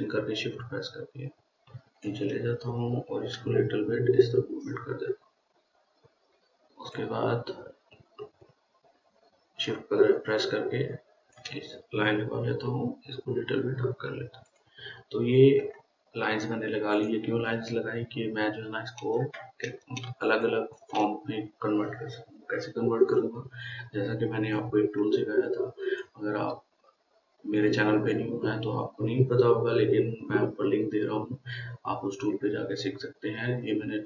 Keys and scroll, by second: 3.8 Left, 20.5-21.3 Up.